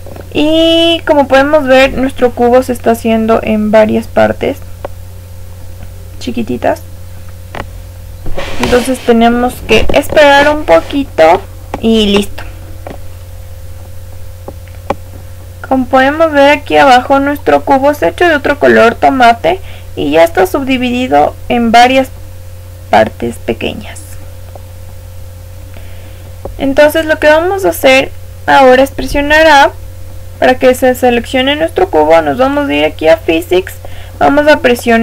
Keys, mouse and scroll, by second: 15.9 click, 16.6-20.0 middle drag, 19.9-20.4 scroll up 1, 20.4-26.7 middle drag, 24.0-26.1 scroll up 1, 26.1-26.7 scroll up 1, 29.0 a, 32.5 click, 34.6-35.0 middle drag.